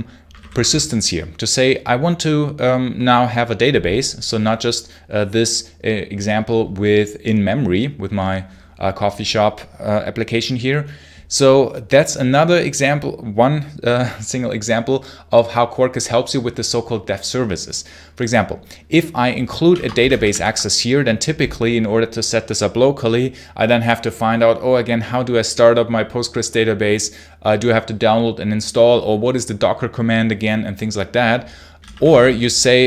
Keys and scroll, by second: 0.1 space, 0.2 h, 0.4 space, 0.5 h, 19.2-20.7 typing, 31.4-32.8 typing.